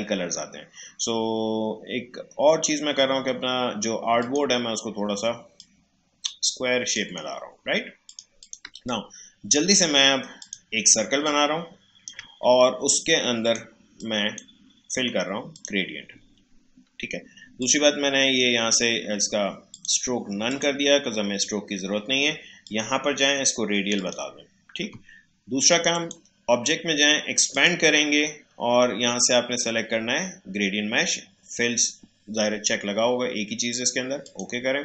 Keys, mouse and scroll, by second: 4.2-8.1 drag, 8.6 space, 8.8 click, 9.1 space, 10.3-15.5 drag, 34.2 click.